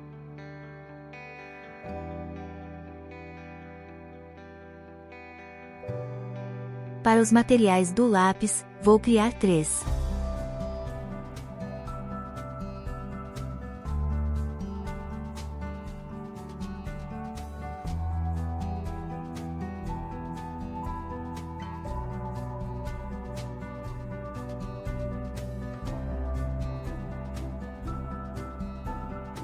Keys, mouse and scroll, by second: 2.1 click, 5.3 click, 6.1 click, 6.8-9.2 drag, 10.6 click, 10.8 click, 11.5 middle click, 14.4 Tab, 14.6 z, 15.5 middle click, 15.8 click, 16.6 click, 17.2 click, 17.4 middle click, 18.3 click, 19.2-20.0 shift+drag, 21.4 click, 22.0 click, 22.6 click, 25.5 click, 26.1 Tab, 26.4-26.8 middle drag, 27.0 Tab, 27.8 click, 28.9 click, 29.2 shift+click.